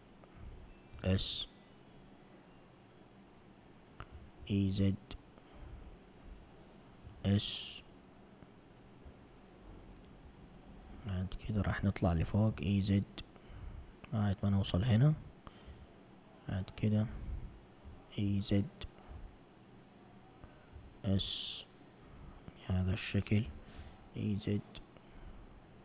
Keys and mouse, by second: 1.0 s, 4.2 e, 7.1 s, 12.3 e, 15.7 s, 17.9 e, 20.8 s, 23.5 e.